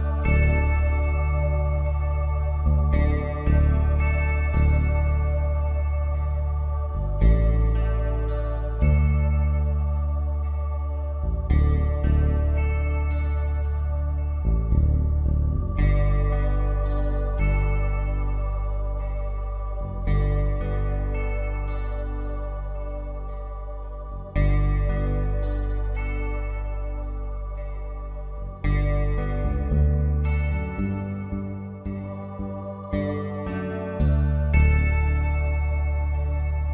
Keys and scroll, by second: 3.5 p, 9.0 ctrl+z, 10.7 space, 11.3 space, 11.7 space, 12.0 ctrl+z, 12.5 ctrl+alt+z, 14.1 space, 15.6 ctrl+z, 16.1 space, 18.1 space, 19.0 ctrl+z, 19.4 space, 21.6 space, 22.7 ctrl+z, 23.1 space, 23.8 space, 24.7 ctrl+z, 26.6 ctrl+z, 31.1 space, 32.4 ctrl+z, 33.0 space, 33.7 ctrl+z, 34.0 ctrl+z, 34.1 space.